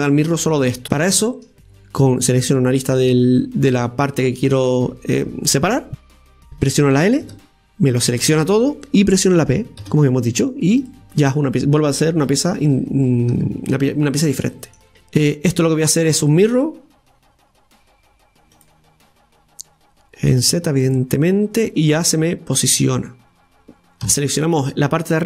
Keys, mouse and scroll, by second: 0.8-2.4 scroll up 5, 2.4-5.4 right drag, 12.3 Tab, 12.6 right click, 13.3 Tab, 13.8 Tab, 14.3-16.5 middle drag, 16.5-19.5 drag, 20.3 click, 20.8 click, 21.4 scroll down 1, 21.6-23.6 middle drag, 23.6 Tab, 24.0 a.